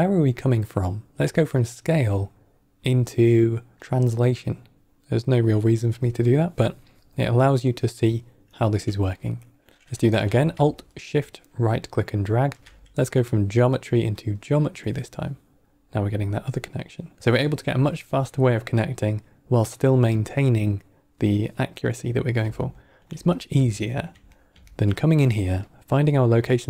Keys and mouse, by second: 10.9-14.2 alt+shift+right drag, 17.2 ctrl+right click, 21.7-22.3 middle drag, 22.6 ctrl+middle click, 23.3 middle click, 23.7 ctrl+middle click, 24.3 middle click, 24.6 ctrl+middle click, 26.4-26.6 drag.